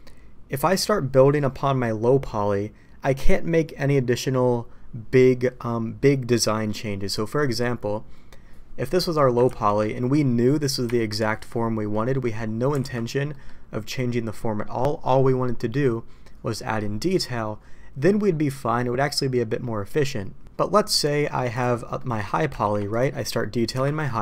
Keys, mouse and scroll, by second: 8.9 middle click, 9.4 ctrl+z, 10.8 KP_Divide, 11.9-12.2 drag, 12.7 alt+a, 13.3 click, 20.6 middle click, 21.9 middle click, 22.6 shift+d, 23.7 KP_Divide.